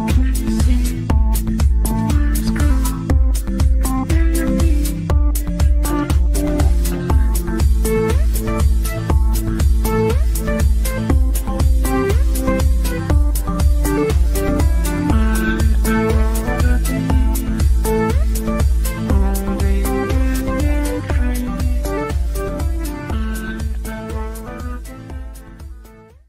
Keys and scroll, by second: 10.8 w, 16.2 F9.